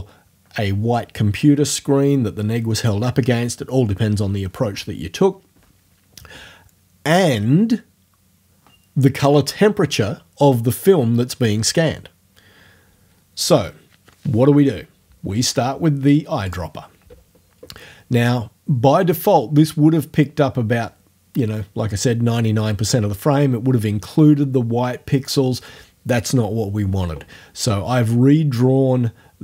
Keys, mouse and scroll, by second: 16.5 click.